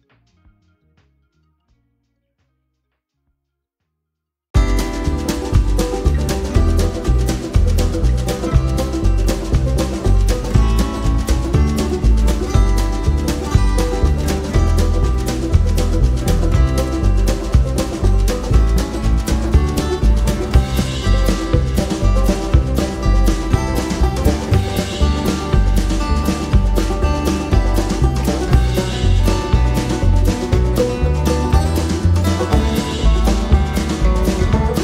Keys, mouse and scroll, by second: 13.1 click, 14.1 click, 17.2 click, 18.6-22.4 drag, 23.6-28.0 drag, 29.1 F1, 30.1 shift+click, 31.2 shift+click, 32.2 shift+click, 33.5 click, 34.5 click.